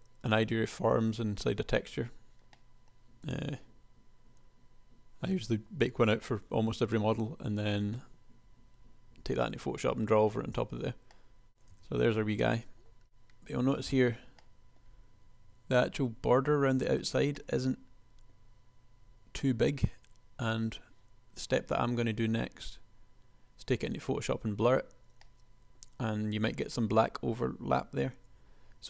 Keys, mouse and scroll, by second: 2.5-4.9 middle drag, 5.6 KP_1, 11.5 KP_1, 12.0 Tab.